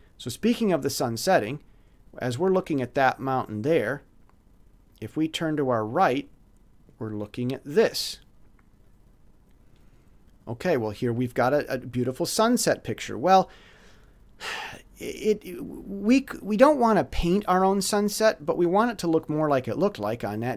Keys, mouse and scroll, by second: 2.8 click, 4.8 click, 5.9 click, 8.8 click, 9.6 middle click, 9.8 click.